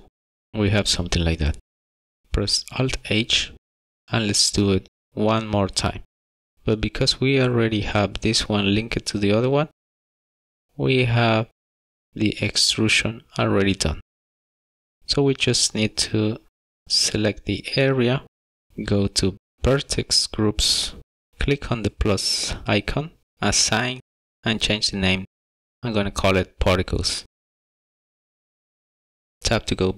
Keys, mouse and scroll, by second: 2.2 shift+middle click, 3.6 alt+h, 4.0 shift+middle click, 5.9 click, 8.7 KP_Decimal, 10.0-10.6 scroll up 5, 11.1 middle click, 14.4 Tab, 15.3 middle click, 16.7 shift+middle click, 17.5 middle click, 22.5 click, 23.7 click, 25.1 click, 25.6 click, 26.8-27.5 click, 27.3 click, 27.3 click, 27.4 click, 27.9 click, 28.1 click, 28.8 click, 29.6 Tab.